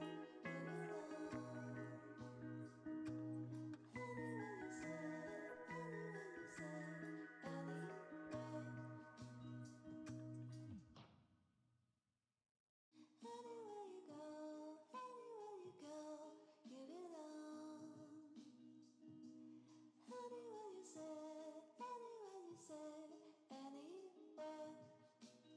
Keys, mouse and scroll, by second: 0.4 shift+click, 4.3 shift+click, 5.0 shift+click, 5.8 shift+click, 7.2 shift+click, 8.3 shift+click, 10.5 shift+click, 15.2 shift+click, 16.4 shift+click, 17.8 shift+click, 18.9 shift+click, 20.5 shift+click, 21.1 middle click, 22.2 shift+click.